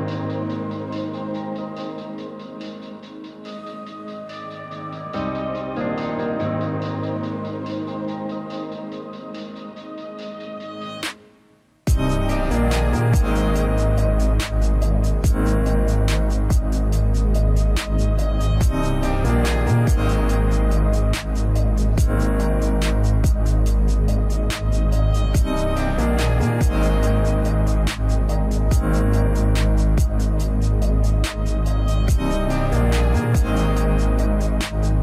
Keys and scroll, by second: 0.4-1.7 typing, 10.8 ctrl+z, 11.2 ctrl+e, 19.1 s, 19.9 a, 20.3 a, 22.0 b, 23.5 ctrl+alt+z, 26.2 s, 29.6 s.